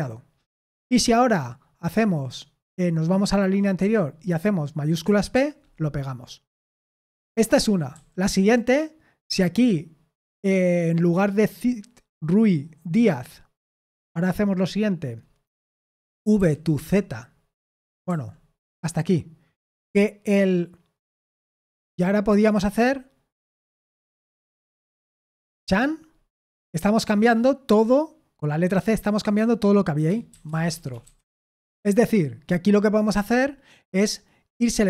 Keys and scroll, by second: 3.8 typing, 5.3 shift+p, 7.0-10.1 typing, 15.6-18.0 typing, 25.4 typing, 30.1-31.9 typing.